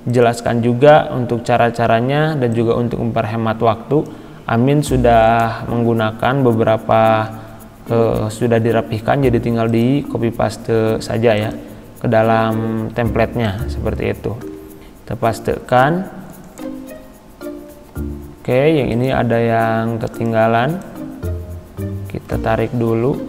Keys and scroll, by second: 7.4 ctrl+c, 14.4 ctrl+v.